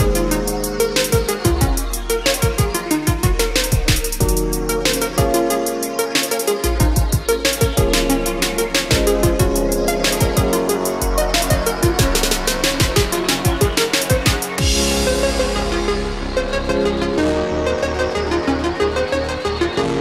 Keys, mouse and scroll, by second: 1.9 scroll down 1, 3.1-3.9 scroll up 1, 5.0-8.1 drag, 14.0 Escape, 15.6 click, 16.3 Delete, 17.5-20.0 drag.